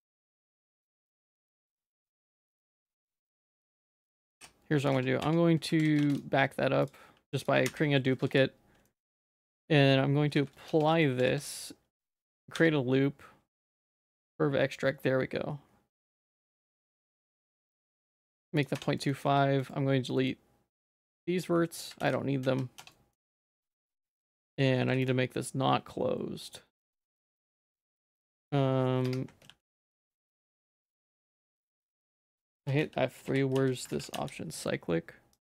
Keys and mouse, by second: 0.1 click, 0.2 h, 0.5 click, 0.8 ctrl+z, 1.0 ctrl+z, 1.2 ctrl+z, 1.4 ctrl+z, 1.7 ctrl+z, 2.0 ctrl+z, 2.2 ctrl+z, 2.4 ctrl+z, 2.7 ctrl+z, 2.8 ctrl+z, 3.0 ctrl+z, 3.2 ctrl+z, 3.5 ctrl+z, 4.1 click, 4.4 h, 4.4 j, 4.9 Tab, 5.2 Tab, 5.8 ctrl+s, 6.1 shift+d, 7.7 h, 8.2 ctrl+s, 8.9 middle click, 9.2 Tab, 9.5 Tab, 10.3 ctrl+a, 10.7 Tab, 10.9 middle click, 11.3 ctrl+r, 12.6 q, 18.8 Tab, 19.0 middle click, 19.2 z, 19.6 middle click, 20.2 middle click, 22.0 x, 22.4 z, 22.8 Tab, 22.9 middle click, 24.0 Tab, 24.2 middle click, 24.4 Tab, 24.9 ctrl+s, 25.1 click, 26.8 click, 29.0 F2, 31.0 F4, 32.4 F3.